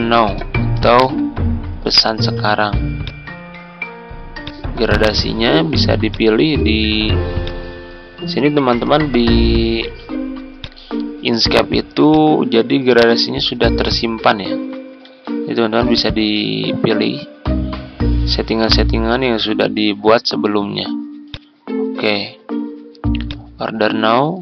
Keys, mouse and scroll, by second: 0.0-1.5 typing, 3.0 click, 15.0 ctrl+z, 15.9-22.8 drag.